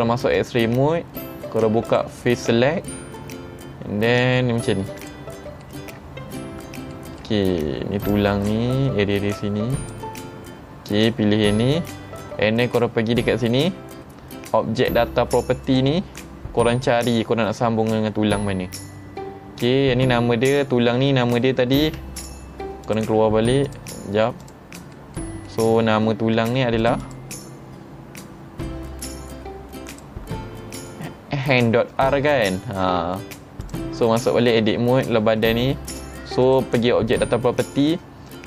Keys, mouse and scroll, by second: 0.4 click, 1.9 click, 5.0 click, 5.7 shift+middle click, 6.3 middle click, 6.3 scroll up 4, 7.0 shift+middle click, 8.1-9.9 drag, 15.7 click, 17.4-17.8 scroll up 3, 18.7-19.6 scroll up 6, 21.9 Tab, 22.2 click, 22.9 click, 23.7 click, 24.4 click, 25.0 middle drag, 25.5 middle click, 25.9 scroll down 2, 26.0 middle click, 26.4 Tab, 26.8 click, 27.0 click, 29.9 click, 32.9 Tab, 33.7 click, 34.7 Tab, 36.5 click, 37.7-38.4 scroll down 7.